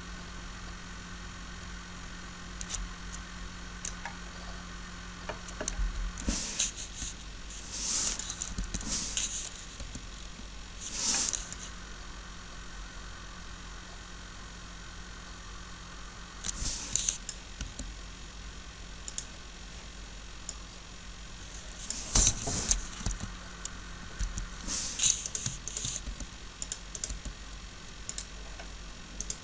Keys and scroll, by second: 5.8 Up, 6.8 r, 8.5 Up, 9.7 r, 17.6 r, 22.2 3, 23.0 Up, 26.0 shift+r, 27.1 r.